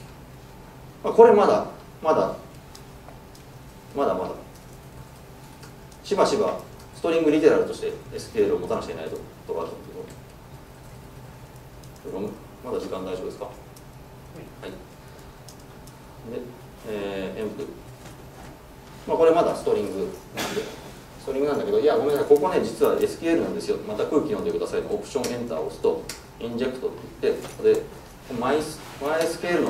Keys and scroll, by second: 3.6 ctrl+shift+super+F12, 20.2 super+w, 25.3 alt+Return.